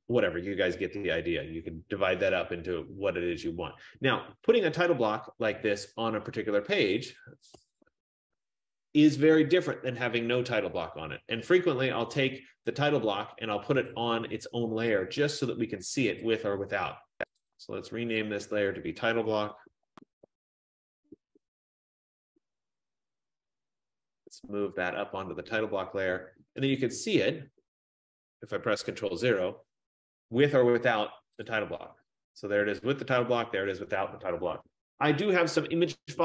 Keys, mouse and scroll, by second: 1.6 ctrl+a, 7.1 click, 7.7-10.0 typing, 10.9 click, 14.1 click, 16.4 click, 17.9 click, 17.9 click, 19.3-21.5 typing, 24.8 click, 27.2 click, 29.0 ctrl+0, 31.6 click, 33.5 click.